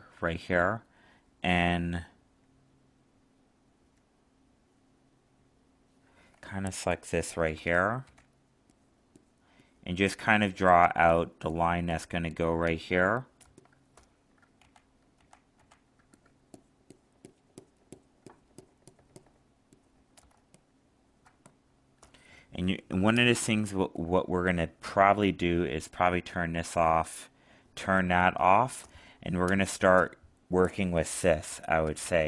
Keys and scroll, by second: 14.6 ctrl+z, 20.3 alt+space.